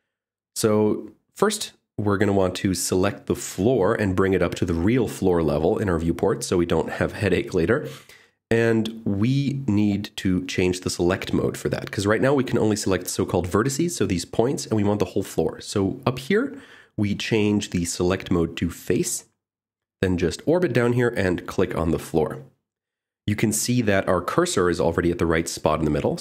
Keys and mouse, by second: 15.5 click, 20.7 click, 24.9 shift+middle click.